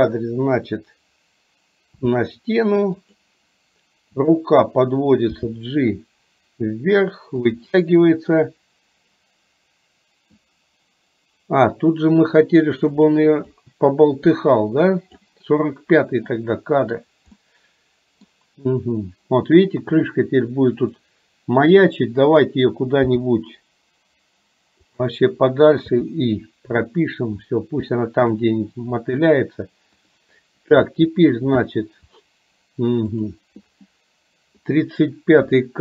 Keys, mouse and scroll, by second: 0.0 KP_3, 2.1 r, 4.3 click, 5.5 g, 7.8-10.5 middle drag, 13.7-15.3 drag, 16.3-17.1 middle drag, 17.5-18.5 middle drag, 21.0 click, 23.2 g, 26.1 i, 28.1 shift+middle click, 30.1 click, 33.2 click, 34.7-35.3 drag.